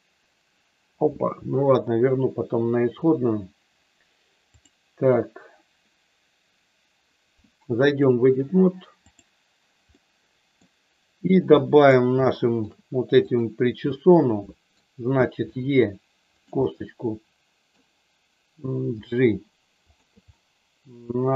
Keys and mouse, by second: 4.4 click, 7.9-9.2 drag, 9.9 middle click, 11.5 middle click, 12.3 shift+middle click, 13.4 click, 13.9 middle click, 15.5 e, 16.3 click, 16.6-17.8 middle drag, 19.0 g, 19.8 click, 20.3-21.3 middle drag.